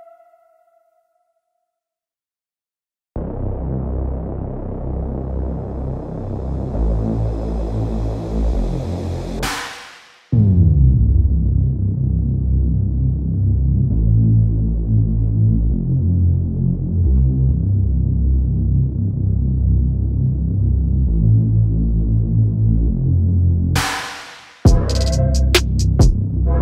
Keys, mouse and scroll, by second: 0.0 click, 0.1 middle click, 0.1 drag, 0.3 scroll down 2, 0.3 shift+middle click, 0.7 scroll up 1, 0.9-1.4 drag, 1.5 shift+middle drag, 1.7 drag, 2.1 drag, 2.2 scroll down 4, 2.2 middle drag, 2.4 shift+middle drag, 2.5 scroll up 2, 2.7-3.3 drag, 3.4 middle click, 3.6 drag, 3.9 middle drag, 4.0 scroll up 4, 4.1 click, 4.4 middle drag, 4.4 click, 4.8 middle drag, 4.9-5.4 scroll up 2, 5.1 drag, 5.4 shift+middle click, 5.4 click, 5.7 middle click, 5.8 click, 5.9 shift+middle click, 6.1 click, 6.3 middle click, 6.4 drag, 6.7 scroll down 4, 6.7-7.1 shift+middle drag, 7.2 middle click, 7.4 drag, 7.4 middle drag, 7.5 drag, 7.7 middle click, 7.7 drag, 8.1-8.5 shift+middle drag, 8.5 scroll up 3, 8.7 drag, 8.9 scroll down 6, 8.9-9.3 shift+middle drag, 9.3 drag, 9.6 middle click, 9.8 drag, 9.8 middle drag, 9.9 drag, 10.3 shift+middle drag, 10.6 scroll up 2, 10.7 shift+middle click, 10.8 click, 10.9 scroll down 3, 10.9 middle click, 11.0 scroll up 1, 11.1 click, 11.3 scroll down 2, 11.3 shift+middle click, 11.5 scroll up 1, 11.7 drag, 12.1 scroll down 1, 12.1 middle drag, 12.2-12.7 drag, 12.7-13.2 shift+middle drag, 13.2 scroll up 4, 13.4 middle click, 13.5 click, 13.7 middle click, 13.8 drag, 14.0 shift+middle drag, 14.1 scroll up 1, 14.2 drag, 14.5 click, 14.5 shift+middle click, 14.8 drag, 15.1 middle click, 15.2 click, 15.2 shift+middle click, 15.3 scroll up 1, 15.4 click, 15.6 shift+middle click, 15.7 drag, 15.9 middle click, 16.0 drag, 16.0 middle drag, 16.2 click, 16.2 middle click, 16.3 click, 16.5 middle click, 16.6 click, 16.8 shift+middle click, 17.1 click, 17.2 shift+middle click, 17.2 click, 17.5 shift+middle click, 17.6 f, 17.7 click, 17.9 shift+middle click, 18.0 scroll up 1, 18.0 drag, 18.2 shift+middle click, 18.2 click, 18.3 shift+middle click, 18.5 f, 18.6 middle drag, 18.7 f, 18.8 drag, 19.0 shift+middle click, 19.3 click, 19.7 middle drag, 20.0 click, 20.2 shift+middle click, 20.3 click, 20.5 middle drag, 20.8 click, 21.1-21.5 middle drag, 21.5-21.9 drag, 21.9 middle click, 22.0 click, 22.1 middle click, 22.3 f, 22.4 middle click, 22.5 scroll up 8, 22.6 middle click, 22.8 drag, 23.1 middle click, 23.2-23.7 drag, 23.7 middle click, 23.8 scroll up 1, 23.9 shift+middle click, 24.4 click, 24.5 middle click, 24.8 scroll up 3, 25.1 click, 25.3 middle click, 25.3-25.7 scroll down 3, 25.7 middle click, 26.0 click.